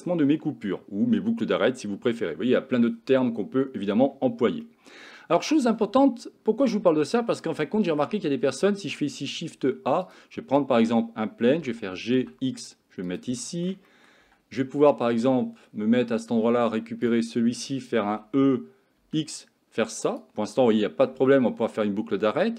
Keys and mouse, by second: 4.7 middle click, 6.1 shift+middle click, 7.2 Tab, 7.7-8.1 shift+middle drag, 8.8 shift+a, 10.6 middle click, 11.6 g, 13.5 shift+middle drag, 13.9 middle click, 14.3 Tab, 14.7 middle click, 17.1 click, 18.1 e, 20.7 middle click, 21.3 shift+middle click.